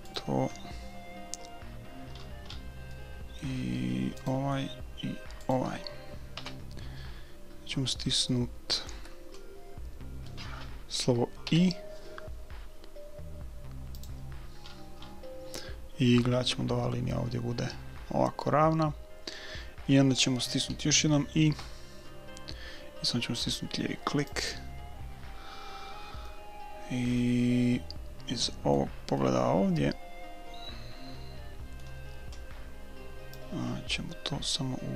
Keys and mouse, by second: 2.2-4.7 middle drag, 4.2-7.0 right drag, 6.4 KP_1, 7.0 click, 7.3-10.2 middle drag, 11.4 i, 14.7-17.0 middle drag, 21.5 i, 26.3-27.9 middle drag, 29.1-31.1 middle drag, 33.3-34.9 drag.